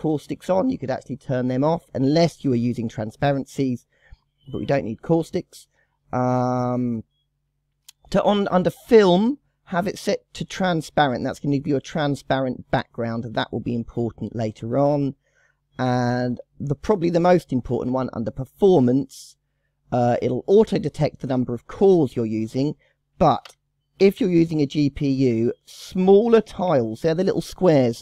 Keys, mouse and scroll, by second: 0.2 click, 0.8 click, 4.4-4.7 scroll down 2, 5.3 scroll down 3, 6.4 scroll down 2, 13.7 scroll down 2, 15.1-15.7 scroll down 2, 22.7 click, 26.5 KP_1, 26.6 KP_6.